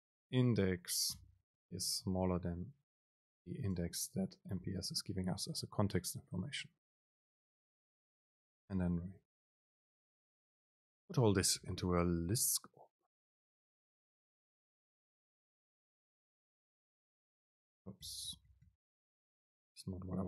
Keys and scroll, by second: 4.2 super+space, 5.0 Right, 7.0 Right, 7.0 Up, 7.8 Return, 9.6 BackSpace, 15.8 BackSpace.